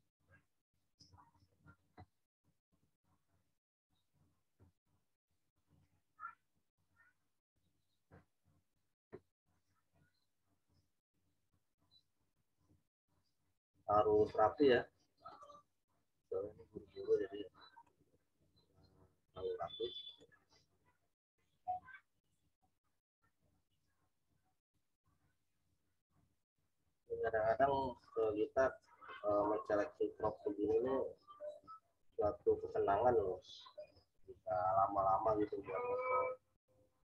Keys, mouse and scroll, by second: 5.6 click, 15.2 click, 20.0 click, 24.8 click, 34.5 click.